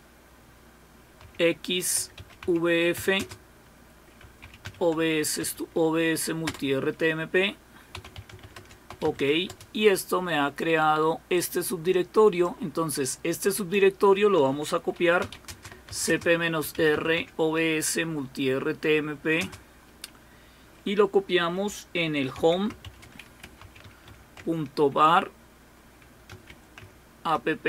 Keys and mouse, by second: 1.2-5.1 typing, 5.4 Tab, 6.4 Return, 7.7-9.4 typing, 11.3-13.1 drag, 13.5 click, 14.3-17.6 typing, 19.4 typing, 22.1-24.4 typing, 26.1-27.3 typing.